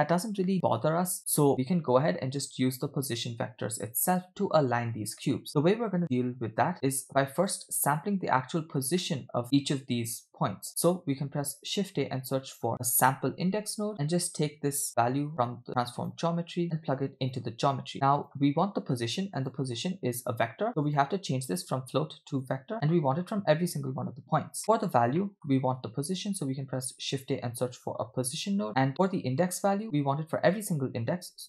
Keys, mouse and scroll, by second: 1.5-4.3 ctrl+drag, 6.0 w, 6.5-7.0 scroll down 2, 7.1-7.6 drag, 8.0 click, 9.0 middle click, 9.3 scroll up 2, 9.5 click, 11.2 scroll up 1, 11.5 shift+a, 15.5 drag, 15.8 click, 16.6-17.4 drag, 17.9 click, 18.6-19.0 scroll up 2, 19.4-20.9 drag, 21.5-22.5 drag, 22.7 middle click, 24.6 middle click, 24.9 scroll down 2, 25.2 middle click, 25.8 click, 27.0 shift+a, 28.9 click, 28.9-29.5 scroll up 2, 29.5 scroll up 1, 29.6 shift+a.